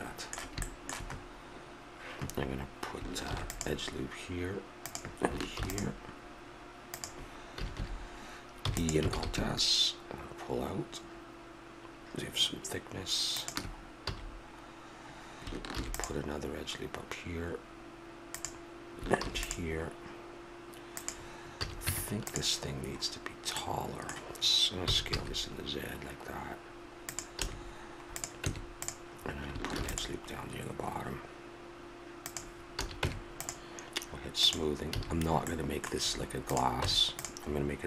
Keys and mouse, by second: 3.2 ctrl+r, 7.6 a, 8.6 e, 9.1 alt+s, 14.0 a, 15.7 ctrl+r, 19.2 ctrl+r, 21.5 a, 21.9 Tab, 24.8 s, 27.4 a, 28.1 click, 28.4 Tab, 29.7 ctrl+r, 32.7 a, 33.0 Tab, 34.9 a, 36.5 right click, 36.8 Tab.